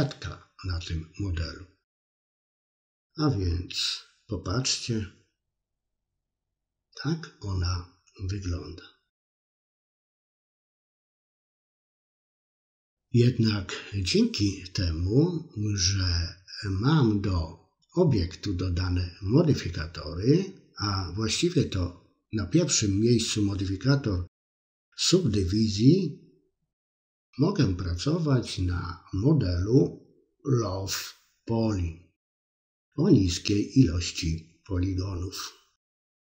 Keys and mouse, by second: 2.6-4.4 drag, 4.6-8.5 middle drag, 9.8-11.5 drag, 11.7-12.7 middle drag, 16.9 click, 18.3 click, 25.1 Tab, 27.4-33.3 middle drag.